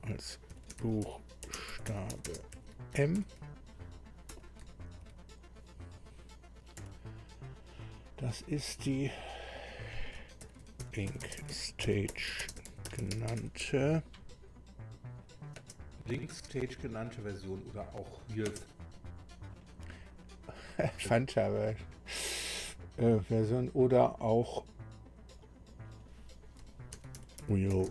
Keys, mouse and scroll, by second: 0.2-3.7 typing, 4.3 Delete, 6.8 ,, 9.1 click, 10.1-14.1 typing, 15.2 click, 16.2 space, 18.6 space, 19.5 click, 20.6 click, 25.4 click, 26.7-27.9 typing.